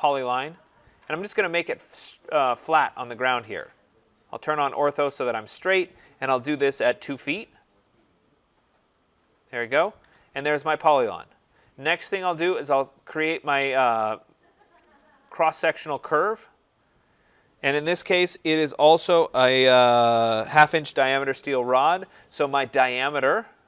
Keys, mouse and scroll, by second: 1.2 click, 4.0 click, 6.2-7.2 typing, 9.0 click, 10.0 Return, 10.4 middle click, 14.7 click, 15.4 middle click, 15.5 scroll, 16.7 click.